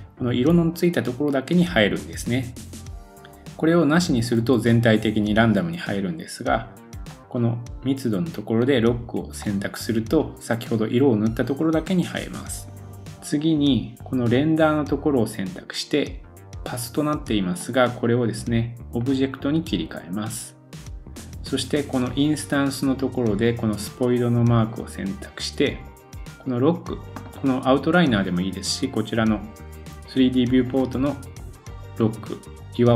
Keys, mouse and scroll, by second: 9.4 middle click, 13.1-14.0 scroll down 7, 14.3 click, 23.4-26.0 drag, 26.0-32.9 middle drag.